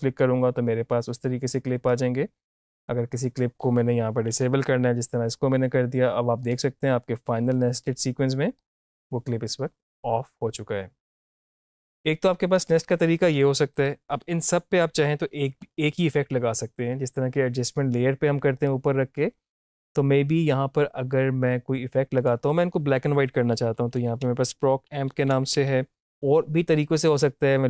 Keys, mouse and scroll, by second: 1.9 click, 4.3 shift+`, 6.5-11.0 drag, 11.3 click, 11.8 shift+`, 12.5 click, 14.3 typing, 18.5 click, 22.2 click, 23.5-26.0 typing.